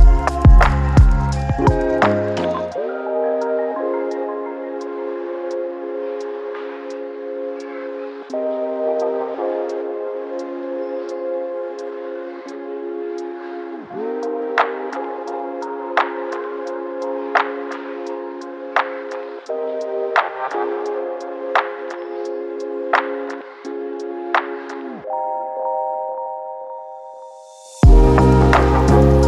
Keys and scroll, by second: 0.0-12.2 typing, 5.3 ctrl+z, 6.3 ctrl+z, 9.8 ctrl+d, 10.2 ctrl+z, 15.6 ctrl+z, 18.5 ctrl+d, 18.7-20.8 typing, 19.5 ctrl+d, 20.3 ctrl+d.